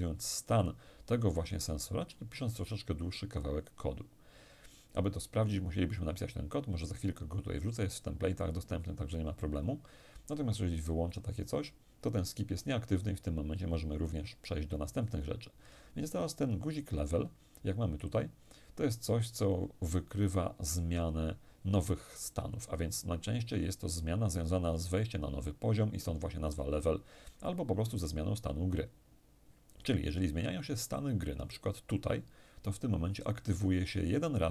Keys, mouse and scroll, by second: 10.7 click, 30.6 click.